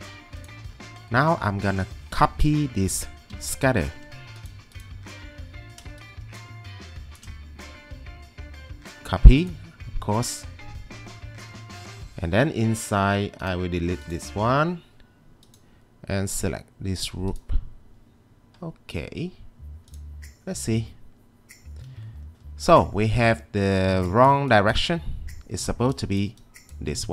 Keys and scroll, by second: 3.3 1, 22.7 ctrl+2.